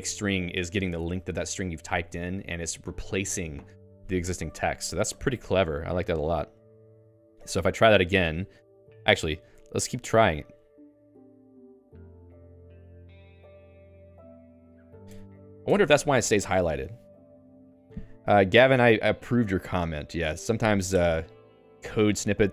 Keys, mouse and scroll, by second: 0.0-2.1 typing, 6.8 Return, 7.7 o, 8.7-15.1 typing, 15.4 ctrl+s, 15.6 Escape.